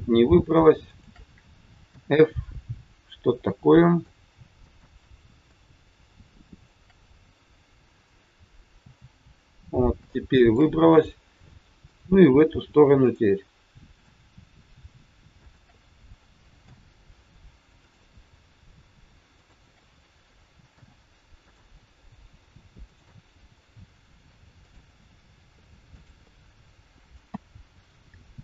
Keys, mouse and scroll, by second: 0.7 shift+click, 1.8 f, 3.4 middle click, 4.5 click, 6.1 shift+click, 8.7 f, 9.7 scroll down 2, 10.1 shift+middle click, 10.9 scroll up 2, 11.8 click, 13.1 click, 13.9 click, 15.4 shift+click, 15.5 shift+click, 16.6 f, 17.9 click, 19.2 shift+click, 20.6 f, 21.3 click, 22.9 shift+click, 24.5 click, 25.7 click, 27.3 f, 27.7-28.4 scroll down 4.